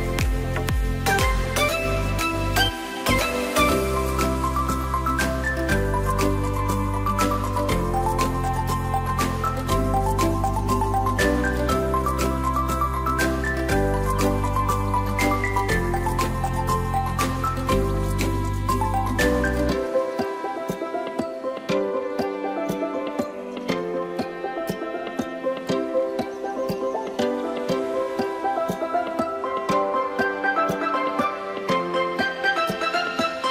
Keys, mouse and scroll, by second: 0.7 click, 1.0-1.5 scroll down 2, 1.5-4.5 middle drag, 4.5-5.0 scroll up 3, 5.0 click, 6.3-7.6 drag, 8.8-10.0 drag, 10.8-11.4 shift+middle drag, 11.4 click, 11.8-12.3 scroll up 1, 12.3-13.5 scroll down 1, 13.5 middle drag, 13.7-14.0 scroll down 3, 14.0-15.8 middle drag, 15.8-18.5 drag, 19.7 click, 21.0 click, 24.4-27.0 drag, 28.3 drag, 28.8 click, 29.1-29.8 scroll up 2, 29.9 shift+middle click, 30.8-31.9 scroll up 2, 31.9 click.